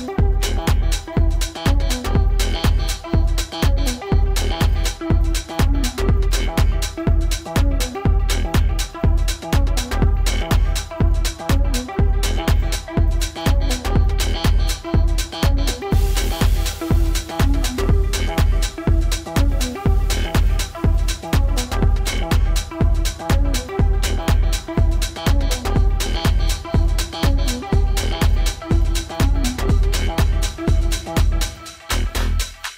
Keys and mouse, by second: 0.7-1.8 drag, 1.6 KP_0, 4.5-5.9 alt+drag, 6.3 alt+click, 8.3 alt+middle click, 9.3 click, 9.3 w, 10.5-11.7 drag, 12.7 alt+click, 18.9-19.9 drag, 19.7 KP_0, 22.0 F4, 30.8 click, 31.6 click.